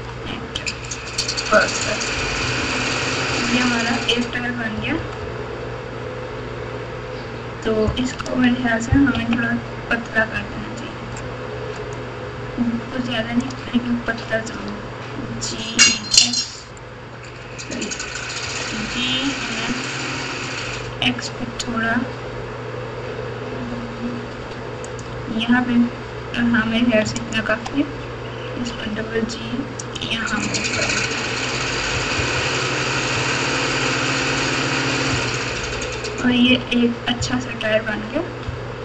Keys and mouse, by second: 1.8 KP_6, 2.1 KP_6, 2.4 KP_6, 2.6 KP_6, 3.3 KP_Subtract, 3.8 KP_Subtract, 3.8 KP_Subtract, 3.9 KP_Subtract, 4.7-6.0 typing, 7.2 Tab, 8.1 alt+z, 9.1 KP_1, 11.9-13.4 drag, 14.5 s, 16.7 right click, 18.4 g, 27.2 alt+click, 28.5 g, 30.4 click, 30.8 alt+z, 31.9 KP_6, 32.1 KP_6, 32.3 KP_6, 33.1 Tab, 35.1 KP_Add, 36.4 KP_6, 37.1 KP_3, 38.4 KP_Subtract.